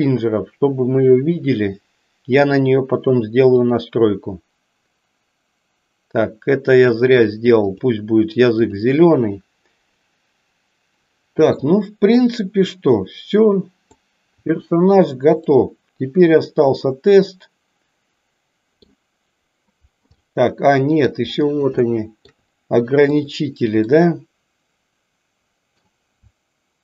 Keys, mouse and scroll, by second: 3.7 click, 7.7 click, 8.5 click, 11.4-13.9 middle drag, 15.5-18.9 middle drag, 20.3 middle click, 21.8 shift+middle click, 23.9-25.8 middle drag.